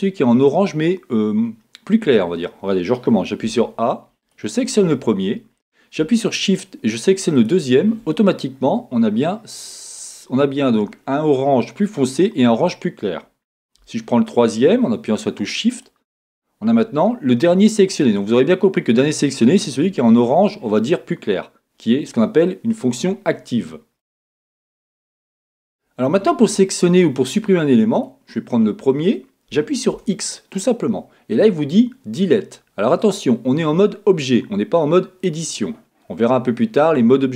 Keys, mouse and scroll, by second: 3.4 a, 4.2 click, 7.3 shift+click, 15.7 shift+click, 18.0 middle click, 21.1-28.0 middle drag, 22.9-23.6 scroll up 2, 23.6-24.0 scroll down 2, 25.3-26.0 scroll up 2, 26.0-28.0 scroll down 2, 28.0 click, 30.1 x.